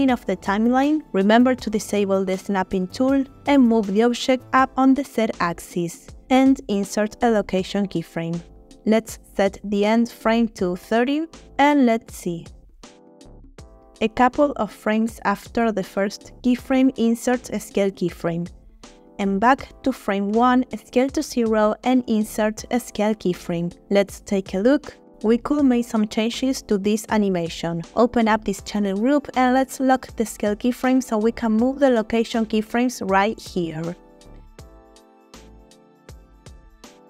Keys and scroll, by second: 2.6 g, 2.8 z, 6.4 i, 9.2 3, 9.7 0, 10.0 Return, 11.4 space, 14.1 space, 17.0 i, 20.2 s, 20.8 0, 22.7 typing, 24.1 space, 26.3 space, 35.8 g.